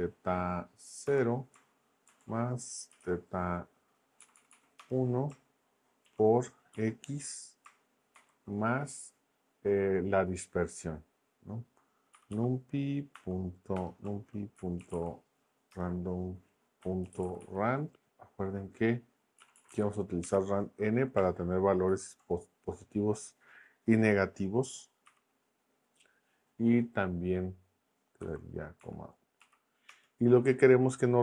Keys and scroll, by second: 0.0-0.3 typing, 1.0 Return, 2.1-3.5 typing, 4.2 Down, 4.8 Return, 6.0 shift+8, 6.7 x, 8.2 shift+=, 11.9-15.4 typing, 15.7 Return, 16.6-17.9 typing, 19.4 Down, 20.2 Return, 21.9 shift+9, 25.0 n, 28.2 ,, 28.8 1, 29.4 Right, 29.9 Return.